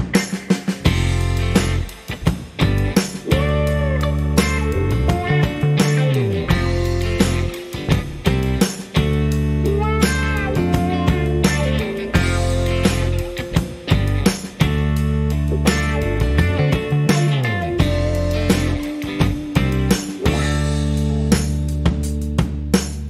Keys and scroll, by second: 11.7 shift+a, 20.0-21.3 typing.